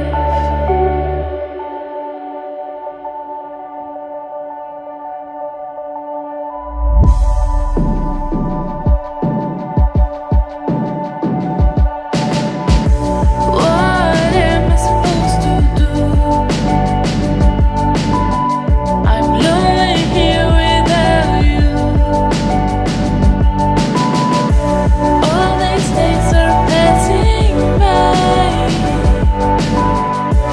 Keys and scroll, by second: 18.1 ctrl+t.